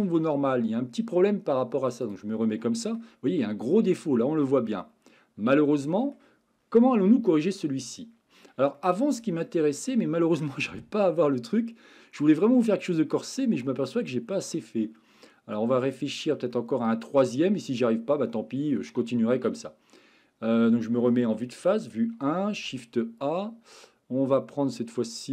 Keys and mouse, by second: 2.1 click, 2.7 middle click, 4.2-6.2 middle drag, 8.0-8.5 shift+middle drag, 8.8-9.2 middle drag, 9.4-9.8 shift+middle drag, 10.8-12.6 middle drag, 13.8-14.5 shift+middle drag, 14.8-15.6 middle drag, 16.5-18.2 middle drag, 18.9-19.5 middle drag, 21.3 KP_1, 22.5 shift+a.